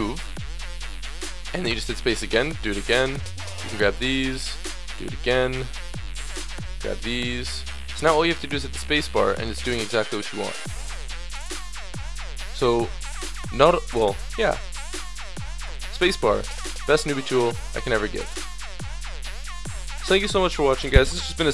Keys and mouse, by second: 1.6 space, 3.3-6.1 drag, 6.5-7.6 drag, 9.7 click, 9.9 click, 13.8 middle click, 13.9-17.4 right drag, 15.6 space, 19.5 Tab.